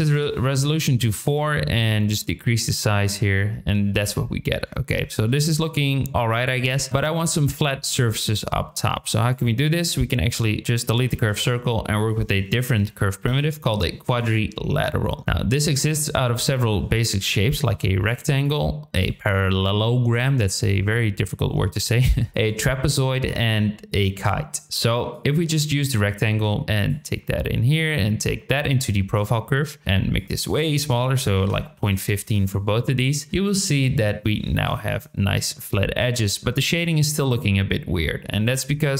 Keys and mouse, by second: 2.2-3.8 shift+drag, 4.7 shift+middle click, 4.8 shift+drag, 4.9 shift+middle drag, 9.4 click, 10.9 x, 11.2 shift+a, 15.9 click, 17.7 shift+drag, 18.5-19.0 drag, 20.3-22.5 drag, 23.3-24.0 drag, 24.8-25.2 drag, 26.4-26.9 drag, 27.8-29.1 drag, 30.1-32.4 drag, 34.6 KP_7, 37.2-37.8 middle drag, 37.8-38.2 drag, 38.4 middle drag, 38.8-38.9 shift+middle drag.